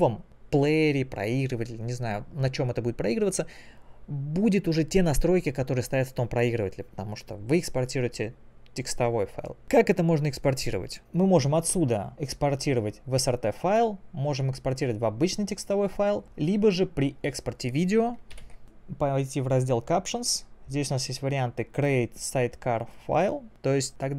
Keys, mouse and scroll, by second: 11.3 click, 16.9 click, 17.3 click, 18.4 ctrl+m, 18.6 click.